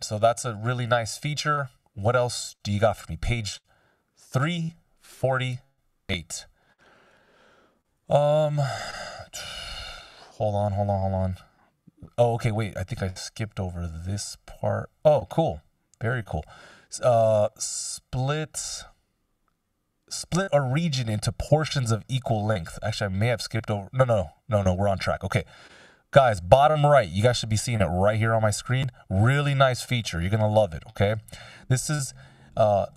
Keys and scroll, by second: 31.3 ctrl+alt+super+m, 31.9 F16.